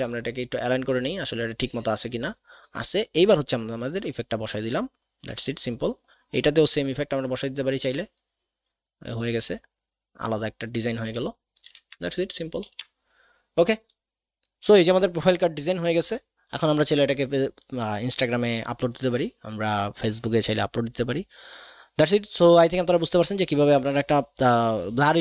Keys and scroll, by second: 12.6 ctrl+alt+s.